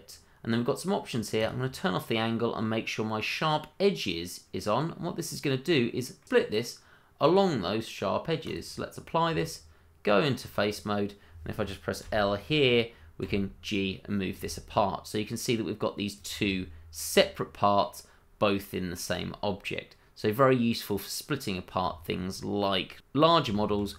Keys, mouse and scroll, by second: 5.7 middle click, 7.2 click, 9.3 Tab, 10.7 click, 12.0 l, 13.2 g, 16.1 click, 16.4 middle click, 20.9-22.9 scroll up 1, 23.6 ctrl+z.